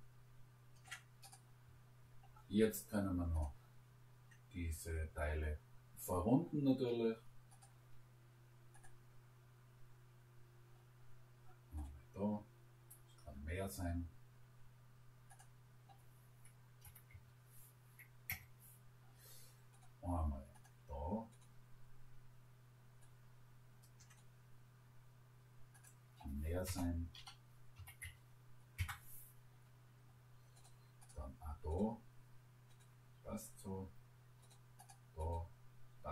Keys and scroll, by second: 16.8 1, 17.1 Return, 26.8 0, 27.2 ., 27.8 5, 28.1 Return.